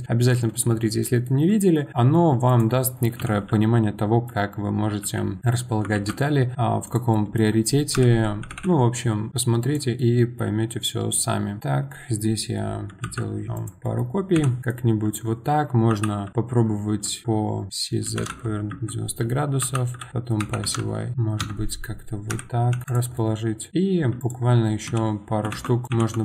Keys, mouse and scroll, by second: 1.7 scroll down 1, 1.9-2.4 middle drag, 2.4 click, 3.2 KP_7, 5.0 g, 7.1-7.9 middle drag, 7.9 KP_1, 10.0-13.0 middle drag, 13.0 shift+d, 13.8 middle click, 14.3 KP_7, 14.6-15.9 middle drag, 19.6 r, 22.3 KP_1, 22.7 g, 22.8 click, 23.1-24.2 middle drag, 24.2 click, 24.9 KP_7, 25.5 shift+d, 25.8 middle click, 25.9 KP_7.